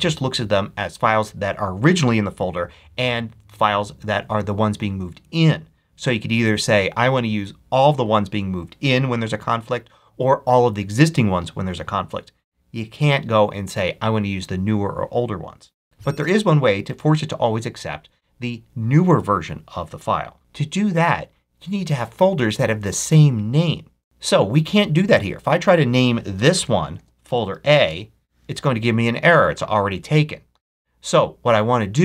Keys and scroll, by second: 26.2 Return, 26.7 Right, 27.1 BackSpace, 27.3 shift+a, 27.7 shift+Return, 28.4 Return.